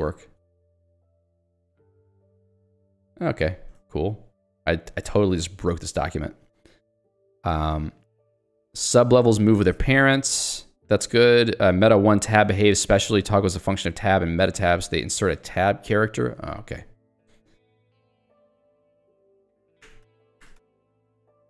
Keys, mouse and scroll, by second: 0.6 Tab, 2.2 shift+Tab, 3.9 Tab, 17.5 ctrl+d, 18.0 ctrl+u, 18.6 ctrl+d, 19.9 ctrl+u.